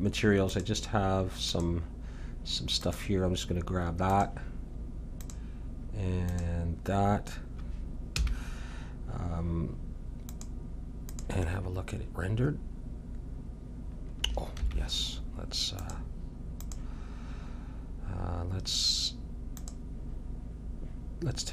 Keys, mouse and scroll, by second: 0.5-7.0 drag, 8.2 a, 10.3-12.2 drag, 14.6 Escape, 15.8-17.8 drag, 19.5-21.4 drag.